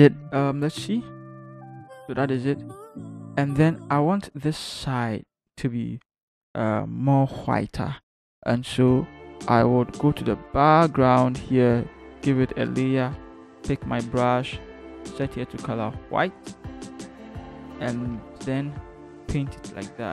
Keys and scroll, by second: 0.6 ctrl+=, 2.9 ctrl+-, 18.5 typing.